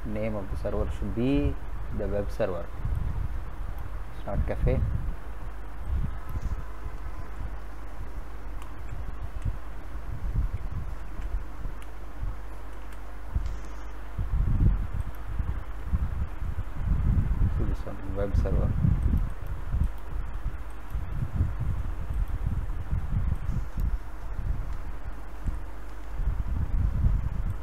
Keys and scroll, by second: 7.2 BackSpace, 8.4 shift+w, 8.8 e, 10.2-12.9 typing, 25.3 ctrl+v.